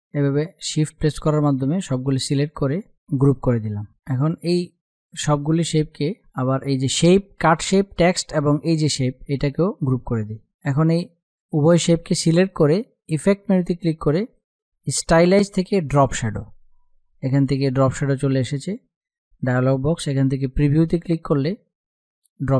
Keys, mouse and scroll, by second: 2.5 right click, 2.7 click, 5.9 ctrl+z, 7.9 shift+click, 9.0 right click, 10.1-12.5 drag, 15.4-19.5 drag, 19.8 click.